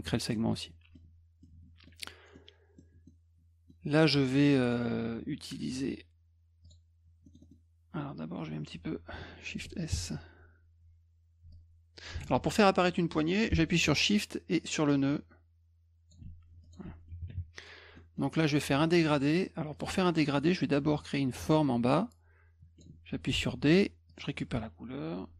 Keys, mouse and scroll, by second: 0.3 middle click, 1.4 middle click, 2.3 middle click, 3.1 middle click, 4.3 middle click, 6.6 click, 7.2 middle click, 7.2 scroll up 4, 7.4 middle click, 9.9 shift+s, 11.5 shift+click, 12.3 ctrl+z, 14.8-16.1 shift+drag, 16.6 click, 16.9 F1, 18.0 middle click, 19.7 click, 20.0 middle click, 21.0-22.8 drag, 23.4 d, 24.1 click.